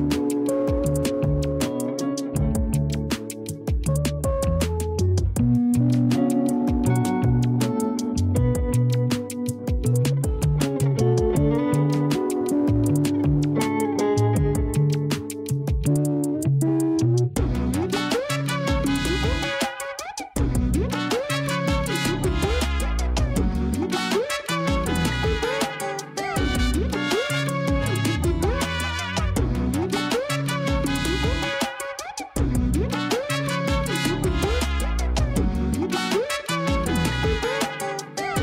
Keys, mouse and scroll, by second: 2.3 alt+shift+middle drag, 3.1 scroll down 1, 3.3-4.3 scroll up 5, 4.3 Tab, 4.8-7.0 typing, 8.9 scroll up 1, 9.3 alt+shift+middle click, 10.3 shift+middle click, 11.2 scroll up 1, 12.3 r, 13.8 s, 15.4-17.3 scroll down 3, 17.3 shift+middle click, 17.8-18.4 scroll up 3, 18.4 g, 19.7 r, 23.6-23.9 scroll up 2, 23.9 s, 25.5-26.3 scroll down 2, 26.3 s, 30.6 r, 31.9 scroll down 3, 32.2 a, 32.4 a, 32.7 Tab, 33.2 a, 33.4-38.4 middle drag, 33.4 a.